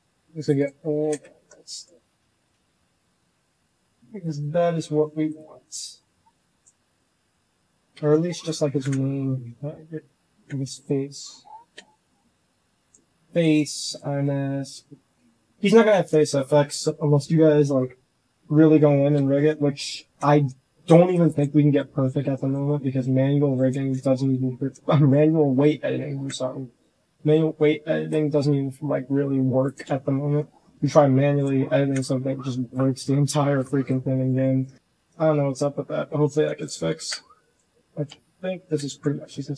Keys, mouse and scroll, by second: 0.4 click, 0.9 z, 1.2 shift+click, 1.6 ctrl+z, 1.8 click, 2.6 l, 4.1 click, 5.6 click, 6.4 ctrl+z, 6.7 click, 6.8 right click, 7.9 ctrl+z, 8.2 ctrl+z, 8.7 ctrl+KP_1, 9.6 KP_8, 9.8 KP_9, 10.2 KP_1, 11.6-15.8 typing, 19.0 l, 20.0 z, 20.2 c, 21.1 click, 21.9 c, 22.3 click, 22.8 c, 23.6 ctrl+click, 23.8 ctrl+z, 24.4 shift+middle click, 24.6 shift+click, 24.7 click, 25.0 middle click, 25.2 middle click, 25.9 KP_1, 26.7 z, 27.3 c, 29.7 z, 30.1 shift+click, 30.4 click, 30.7 g, 31.7 KP_1, 32.4 shift+click, 32.7 click, 33.3 shift+click, 33.8 g, 34.4 shift+click, 35.4 l, 36.2 g, 36.9 KP_1, 37.8 shift+middle click, 38.7 shift+click, 39.0 g.